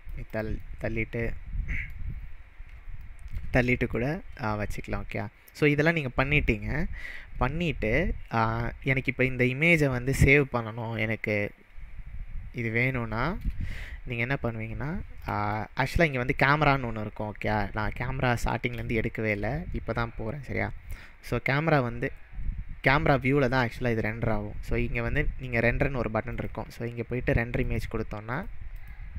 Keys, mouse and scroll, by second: 0.3 click, 0.6-2.1 middle drag, 2.2-2.7 scroll up 4, 3.0-4.1 shift+middle drag, 3.2 shift+scroll up 1, 8.4-9.0 scroll down 2, 9.1-9.6 middle drag, 12.9-13.4 shift+middle drag, 26.2 shift+middle click, 26.3-27.7 drag, 28.3 click.